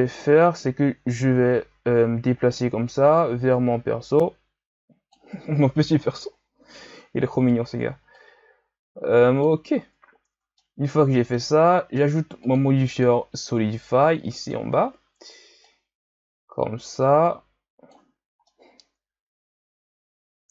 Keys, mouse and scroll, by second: 0.6 scroll up 2, 0.8 Tab, 1.5 a, 1.7 a, 2.5-5.5 drag, 6.2 KP_1, 7.0-8.1 scroll up 2, 8.1-9.7 drag, 9.7-10.3 ctrl+scroll up 4, 10.3 Tab, 10.6-12.4 middle drag, 12.4-12.9 drag, 14.5-18.4 drag, 18.4-20.5 middle drag.